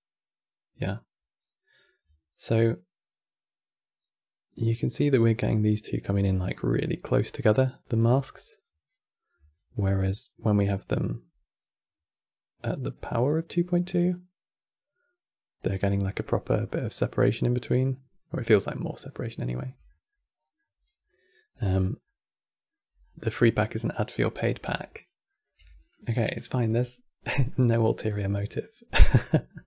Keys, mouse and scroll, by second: 8.3-12.2 drag, 19.6 middle click, 20.1 scroll down 1, 20.2-22.7 middle drag, 22.7-23.0 scroll down 4, 23.0-23.8 middle drag, 23.8 click, 24.3 g, 25.0 middle click, 25.3 g, 25.9 middle click, 26.4 scroll down 3, 26.6-27.8 middle drag, 27.8 click, 28.6 g.